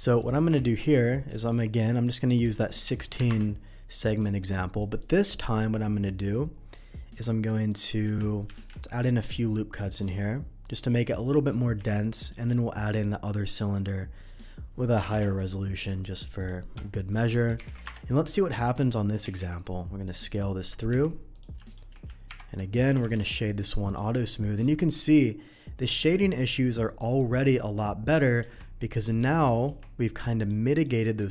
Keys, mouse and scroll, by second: 0.0 Delete, 0.0 middle click, 0.5 shift+a, 1.5 click, 2.3 click, 2.8 1, 3.1 6, 3.3 Return, 4.8 middle drag, 7.5 middle click, 8.1 Tab, 8.5 ctrl+r, 10.6 click, 10.9 right click, 11.8 Tab, 12.4 shift+a, 13.4 click, 14.2 click, 14.9 6, 15.0 4, 15.1 Return, 16.0 right click, 16.3 click, 17.1-19.4 typing, 17.8 Return, 19.1 click, 20.2 click, 20.6 s, 20.6 middle click, 20.9 s, 21.3 click, 21.7 shift+click, 22.2 ctrl+KP_Subtract, 23.0 shift+2, 23.2 click, 23.5 right click, 23.8 click, 24.4 middle click, 26.9 middle click, 28.4 Tab, 29.3 middle click, 30.4 click, 30.7 click.